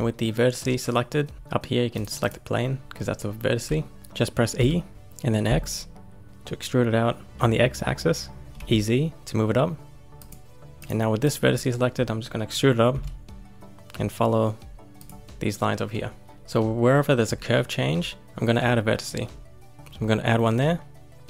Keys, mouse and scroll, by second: 1.9 click, 2.2 click, 3.8 shift+middle click, 4.5 e, 8.5 e, 10.7 click, 11.2 click, 12.9 e, 15.2-16.1 scroll up 1.